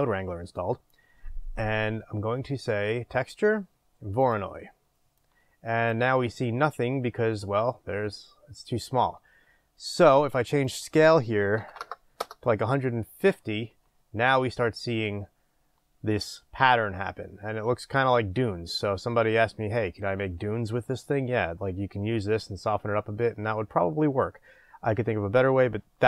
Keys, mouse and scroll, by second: 5.3-26.0 drag, 12.3 Return.